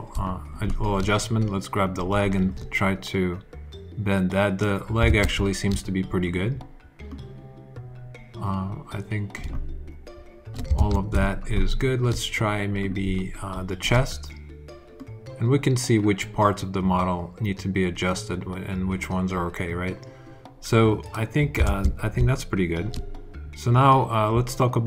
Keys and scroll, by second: 0.0 alt+super+z, 4.9 super+z, 10.6 alt+super+z, 21.5 super+z, 22.0 alt+super+z.